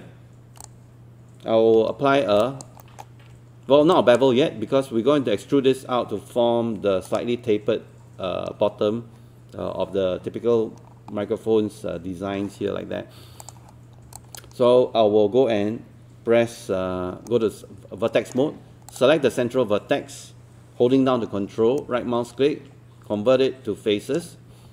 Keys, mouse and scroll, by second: 0.6 click, 1.8 1, 2.4 alt+click, 2.8 scroll up 1, 4.0-5.1 alt+drag, 10.8-11.2 scroll down 1, 13.4 click, 14.2 alt+click, 17.3 right click, 18.9 click, 21.8-24.2 ctrl+right drag.